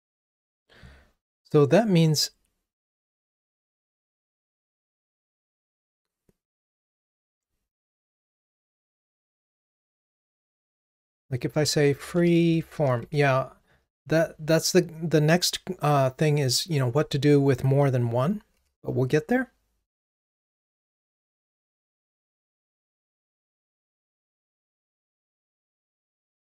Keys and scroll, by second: 18.6 ctrl+r.